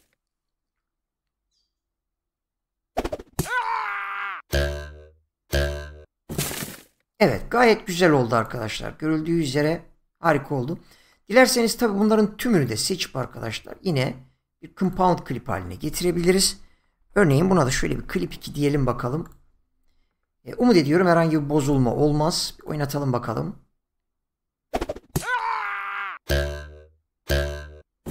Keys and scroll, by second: 16.8-18.0 typing.